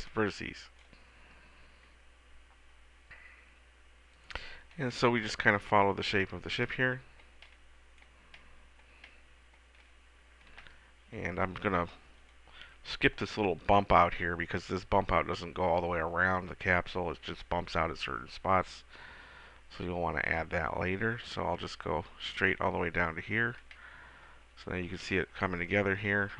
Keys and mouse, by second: 5.7-10.9 middle drag, 22.9 click, 23.7-25.4 middle drag, 25.5-26.3 middle drag.